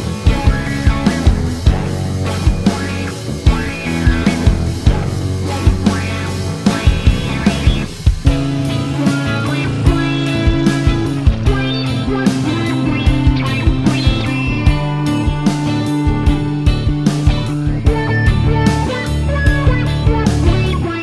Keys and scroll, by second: 0.0-0.8 typing, 2.0 typing, 13.8-15.2 typing, 16.7 typing.